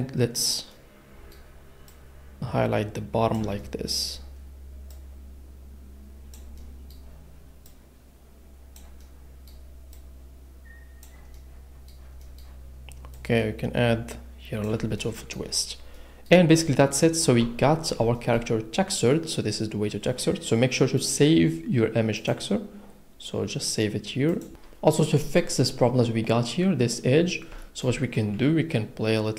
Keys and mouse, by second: 1.9 click, 15.9 middle click, 17.4 a, 18.1 shift+click, 22.1-24.5 drag, 25.7-27.1 middle drag.